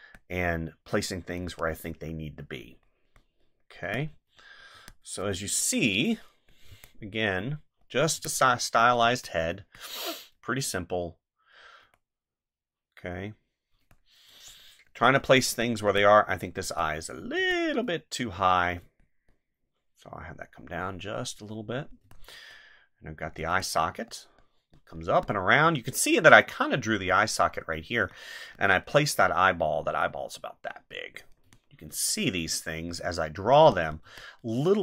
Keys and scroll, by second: 1.4 space, 3.8 space, 6.7 space, 8.1 space, 15.9 space, 17.4 space, 22.0 space, 23.5 space, 25.6 space, 28.0 space, 31.4 space, 34.0 space.